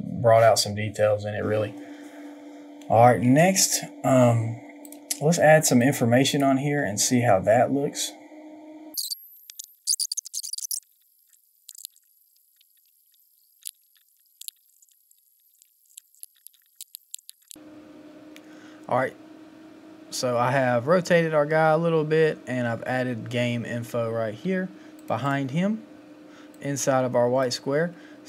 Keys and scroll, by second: 9.5 ctrl+v, 9.6 ctrl+z, 9.8 ctrl+c, 9.8 ctrl+v, 10.0 Return, 10.1 ctrl+t, 10.5 s, 10.8 Right, 11.2 Return, 11.6-13.9 typing, 14.1 ctrl+t, 14.3 Return, 14.5 ctrl+j, 14.9 ctrl+t, 15.1 Return, 15.3 Return, 15.5 ctrl+c, 15.6 ctrl+v, 15.6 ctrl+a, 15.6 ctrl+k, 15.9 Down, 16.0 Down, 16.3-17.4 typing, 16.4 Return, 16.9 ctrl+t, 17.1 Return, 17.4 Right.